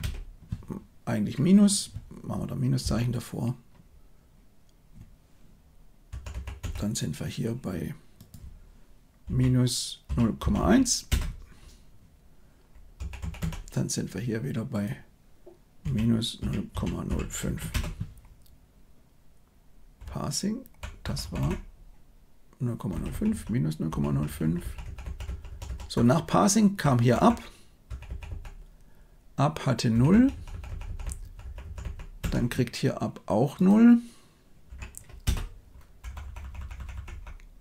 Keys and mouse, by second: 6.0 Right, 6.3 Right, 6.5 Right, 8.2-11.0 drag, 12.9 Right, 13.1 Right, 13.3 Right, 14.8-17.7 drag, 20.0-20.7 Left, 21.0 Left, 21.1 Left, 21.3 Left, 22.9 Right, 23.0 Right, 23.2 Right, 23.8 Right, 24.0 Right, 24.2 Right, 24.4 Right, 24.6 Right, 24.8 Right, 25.0 Right, 25.2 Right, 25.4 Right, 25.6 Right, 25.9-26.7 Left, 27.1 Left, 27.8 Right, 28.0 Right, 28.2 Right, 29.9 Right, 30.1 Right, 30.3 Right, 30.4 Right, 30.6 Right, 30.8 Right, 31.0 Right, 31.1 Right, 31.3 Right, 31.6 Right, 31.7 Right, 32.1 Right, 33.5-35.2 drag, 36.0 Left, 36.2 Left, 36.3 Left, 36.5 Left, 36.7 Left, 36.9 Left, 37.0 Left.